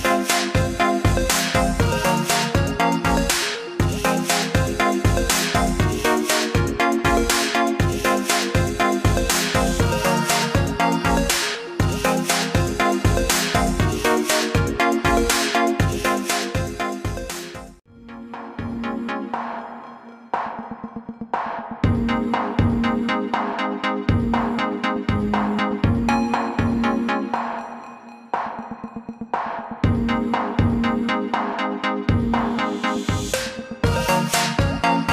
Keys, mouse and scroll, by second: 2.8 click, 20.0-20.3 scroll up 1, 26.7-27.2 scroll down 2.